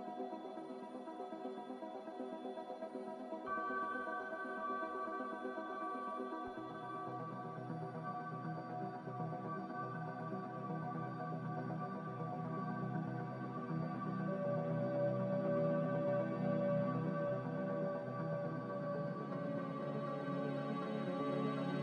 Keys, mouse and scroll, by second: 6.8 q, 10.9-11.8 typing.